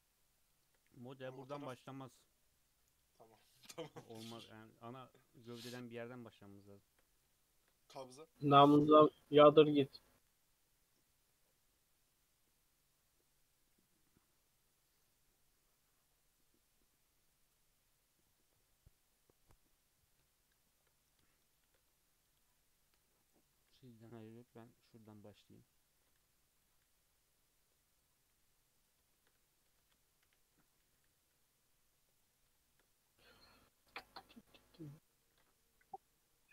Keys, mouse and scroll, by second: 0.2-3.2 shift+middle drag, 6.5-8.5 shift+middle drag, 8.5 KP_3, 20.5-20.9 shift+middle drag, 20.9-21.4 scroll up 2, 21.4 shift+middle drag, 21.6 shift+a, 22.9-26.8 typing, 28.3 g, 29.1 shift+middle drag, 29.3 scroll up 1, 29.7 Tab, 29.9 alt+z, 30.2 1, 30.4 click, 30.9 g, 32.6 shift+middle drag, 32.7-33.4 shift+scroll up 5, 33.4 drag, 34.0 g, 35.3 ctrl+r.